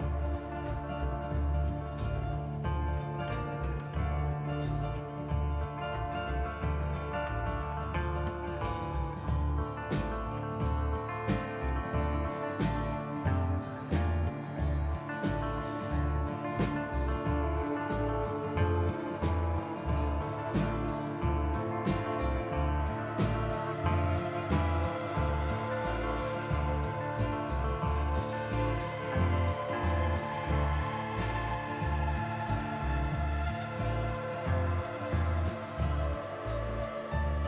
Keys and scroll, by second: 0.1 t, 2.3 F4, 4.0 t, 6.0 F4, 7.9 p, 8.1 F4, 11.7 ctrl+z, 16.6 ctrl+z, 17.5 ctrl+z, 19.0 f, 22.2 ctrl+z, 23.2 ctrl+z, 26.6 f, 30.3 f, 33.6 ctrl+z, 34.6 f.